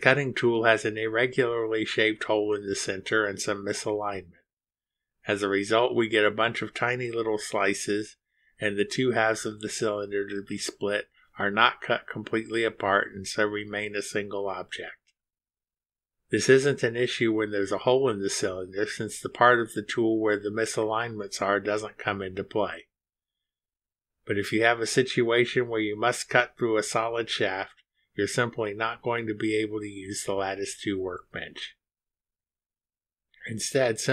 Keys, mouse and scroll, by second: 2.3-2.6 scroll up 1, 3.7 click, 4.1 space, 5.9 space, 7.0 space, 20.1 click, 24.4 ctrl+z, 28.7 scroll up 2, 29.6 click, 29.9 space, 31.6 click, 31.9 space.